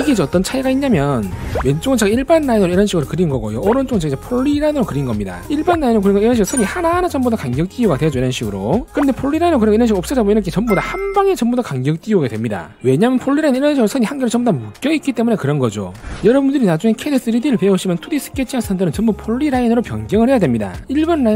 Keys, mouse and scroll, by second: 2.6 click, 2.9 click, 3.4 click, 3.7 click, 4.5 click, 4.9 click, 5.7 click, 6.3 click, 6.9 click, 7.3 click, 7.7 click, 8.1 click, 8.3 click, 11.1 click, 11.6 click, 11.9 right click, 14.4 click, 18.7-19.6 typing, 19.5 right click.